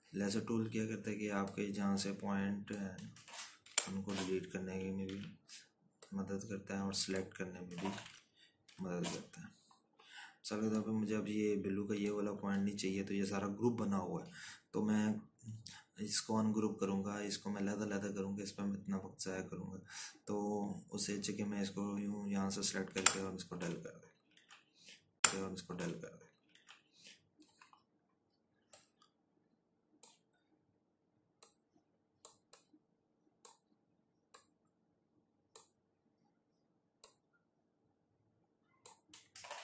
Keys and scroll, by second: 5.0 Delete, 6.5 ctrl+z, 9.4 Left, 10.0 Right, 24.3 Delete, 25.8 ctrl+z.